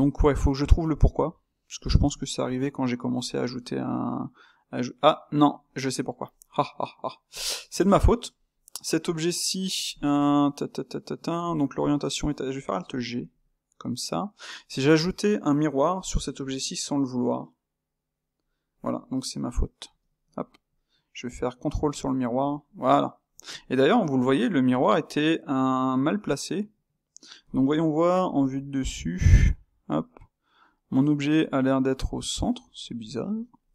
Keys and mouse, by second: 2.6-7.3 middle drag, 7.3 click, 7.8-13.2 ctrl+shift+middle drag, 13.2 alt+g, 13.9-15.9 middle drag, 15.9 click, 19.0-22.0 middle drag, 22.0 space, 22.8-28.1 middle drag, 28.1 KP_7, 29.4-33.7 ctrl+middle drag.